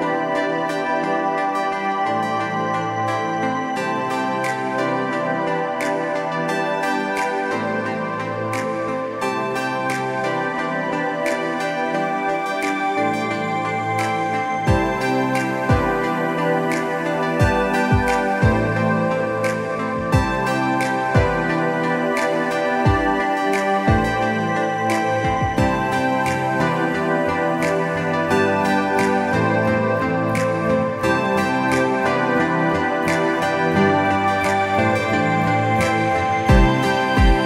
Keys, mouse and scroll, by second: 3.9 scroll up 1, 4.1 click, 6.2 space, 6.5 click, 7.1 click, 8.0 scroll up 1, 8.5 click, 9.0-12.2 typing, 9.2 click, 9.9 click, 10.6 click, 11.2 click, 11.5 scroll down 1, 11.8 click, 12.6 click, 13.0 scroll down 1, 13.8 click, 14.0 alt+scroll up 1, 14.3 click, 15.2 space, 15.4 click, 16.3 click, 16.8 space, 17.2 click, 18.1 space, 18.4 click, 18.7-19.3 scroll up 2, 19.0 click, 19.3 click, 20.0 space, 20.4 click, 21.4 space, 21.8 click, 23.0-23.5 alt+scroll down 3, 23.3 space, 23.5 alt+scroll up 1, 23.7 click, 24.4 click, 26.0-26.3 alt+scroll up 2, 26.3 click, 26.7 scroll up 1, 26.8 click, 28.1 click, 29.3 space, 29.5 alt+scroll down 1, 29.6 click, 29.7 space, 29.9 click, 32.3 alt+click, 32.6 space, 32.7 alt+scroll up 1, 32.9 click, 34.0 click, 34.3 click, 34.9 click.